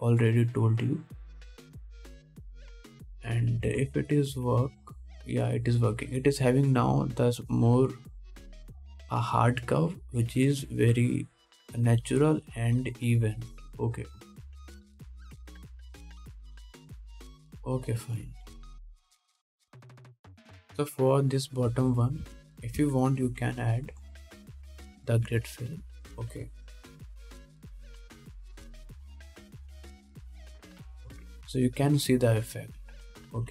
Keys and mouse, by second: 4.9 ctrl+Tab, 6.1 middle click, 18.0 ctrl+s, 23.2 click, 23.2 middle click, 23.2 right click, 23.4 Tab, 24.4-27.1 drag, 25.1 3, 25.6 x, 26.5 1, 27.1 alt+middle click, 27.3-33.5 drag, 28.1 2, 29.3 F3, 30.5 alt+a, 30.9 ctrl+Tab.